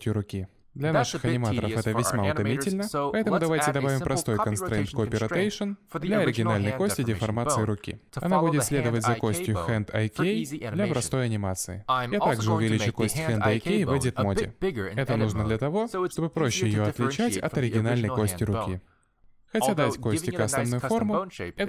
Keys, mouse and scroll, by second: 0.6 click, 0.9 middle click, 1.2 g, 1.6 r, 2.7 middle click, 3.2 click, 3.4 middle click, 4.4 alt+r, 4.7 click, 5.1 middle click, 5.5 click, 7.4 click, 10.6 click, 11.6 click, 11.8 g, 12.6 Tab, 13.1 scroll up 3, 13.2 ctrl+z, 13.2 c, 13.4 c, 14.3 g, 17.0-17.6 scroll down 4, 17.3 Tab, 17.6 scroll up 1, 18.4 click, 19.0 g.